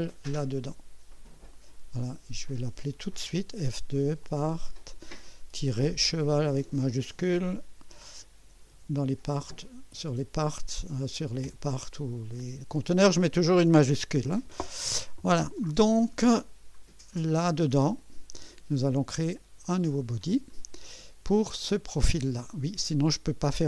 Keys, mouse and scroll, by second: 2.4 click, 3.6 F2, 4.2 click, 5.5 -, 6.8-9.9 typing, 11.4 Return, 16.8 scroll down 2, 19.6 click, 20.3 scroll down 2.